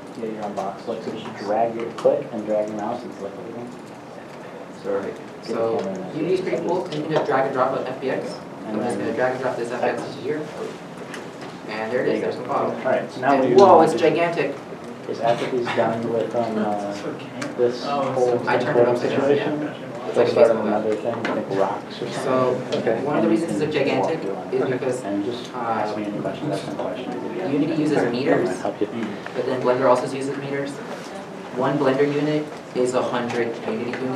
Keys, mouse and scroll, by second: 14.7 right click, 15.1 w, 15.4 s, 16.1 w, 20.4 w, 21.9 a, 22.1 d.